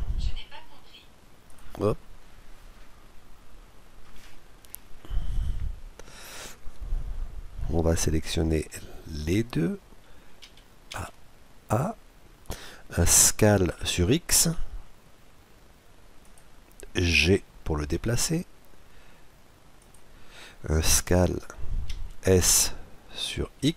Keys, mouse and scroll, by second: 10.4-13.5 middle drag, 10.4 a, 10.9 a, 13.5 s, 17.1 g, 21.9 s.